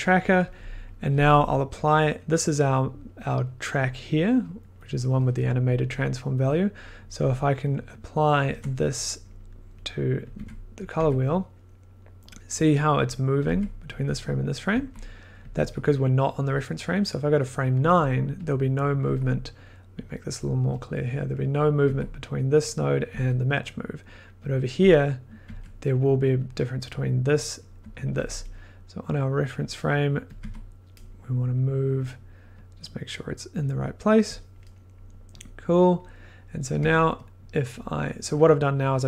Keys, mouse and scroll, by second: 1.0 scroll, 1.9 click, 3.5 middle click, 4.0-5.0 click, 4.7 click, 4.8 click, 6.6 scroll, 8.4 ctrl+click, 8.7 click, 8.8 click, 9.0 click, 10.3 click, 10.3 1, 10.8 click, 11.0 1, 13.4 click, 13.5 1, 13.9 click, 14.0 2, 15.5 click, 15.6 1, 17.4 click, 18.0 click, 18.4 click, 19.0 1, 20.0 click, 20.9 click, 20.9 scroll, 21.8 1, 22.7 click, 23.1 2, 24.4 click, 24.9 click, 25.4 1, 26.5 click, 27.8 2, 28.2 click, 29.3 click, 30.4 1, 31.4 click, 31.5 click, 31.6 click, 31.7 click, 33.7 click, 34.3 click, 35.4 click, 36.8 1, 37.2-37.5 drag, 37.7-38.1 scroll.